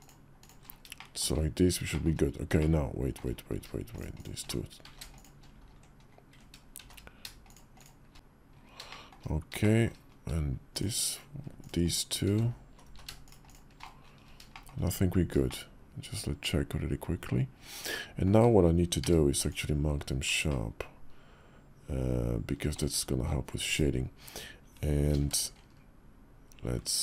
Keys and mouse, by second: 0.1 shift+click, 0.7 shift+click, 1.7 shift+click, 2.3 shift+middle click, 3.5 shift+middle click, 4.6 z, 6.6 shift+z, 8.1 ctrl+z, 8.1 /, 8.6 shift+middle click, 9.4 shift+middle click, 11.6 shift+click, 12.1 ctrl+z, 12.6 ctrl+z, 14.3 shift+click, 15.2-18.0 shift+drag, 18.8 q, 20.2-22.5 shift+drag, 23.4 /, 24.9 ctrl+b.